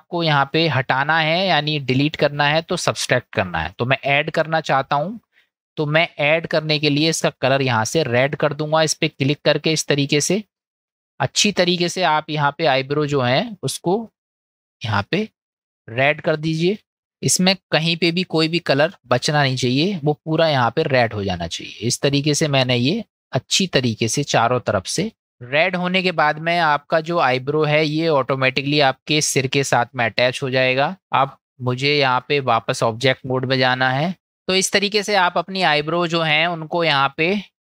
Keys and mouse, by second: 6.5-11.2 drag, 12.6 middle click, 14.9 click, 15.6 click, 16.0 click, 16.8 click, 16.9 middle click, 18.7 click, 19.2 click, 19.4 click, 19.7 click, 20.4-23.7 drag, 24.0 middle click, 24.6 middle click, 25.1 click, 25.7-26.7 middle drag, 27.4 shift+middle click, 30.5 middle click, 32.1-32.7 drag, 34.1-34.6 middle drag, 37.1-37.6 middle drag.